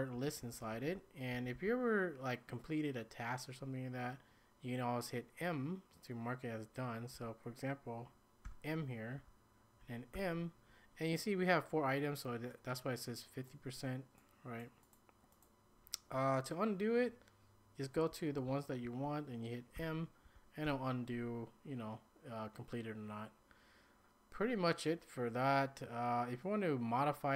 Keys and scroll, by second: 0.0-2.0 typing, 7.1 k, 8.4 m, 9.2 j, 10.1 m, 17.7-21.1 typing.